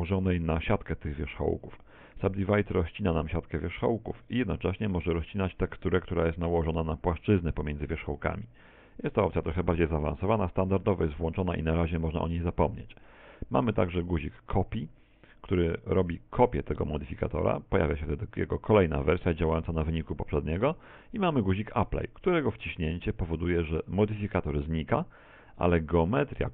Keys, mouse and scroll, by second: 16.5 Tab, 17.6 click, 20.8 click, 23.3 click, 25.9 Tab, 26.4-26.5 scroll down 3.